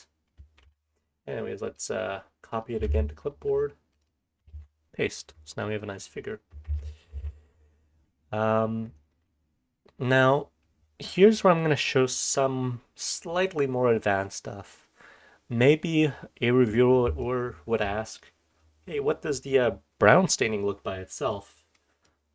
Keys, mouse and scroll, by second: 1.6 click, 14.1-15.7 scroll down 2, 15.7-16.6 drag, 15.7-16.4 scroll down 2, 17.1-18.2 scroll down 2, 17.2-18.2 drag, 20.7-22.3 scroll down 3, 21.3-21.7 drag, 22.0-22.3 drag.